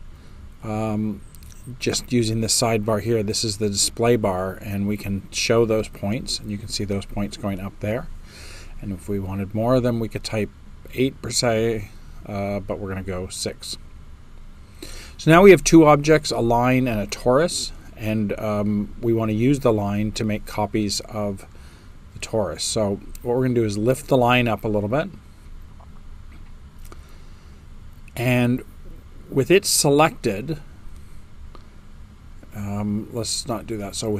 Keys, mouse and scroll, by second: 0.7-1.9 middle drag, 0.7 space, 2.2-3.3 right drag, 2.2 space.